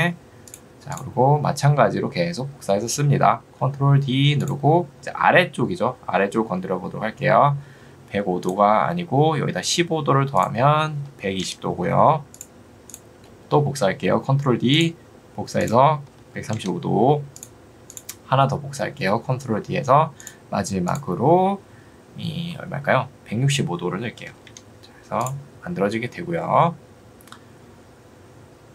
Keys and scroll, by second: 10.9 1, 11.3 0, 11.5 Return, 16.1 3, 16.5 5, 16.7 Return, 24.1 6, 24.5 Return.